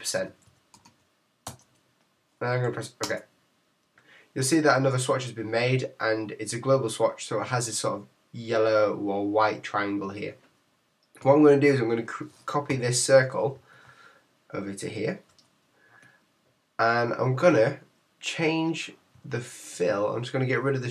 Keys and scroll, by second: 5.1 Return.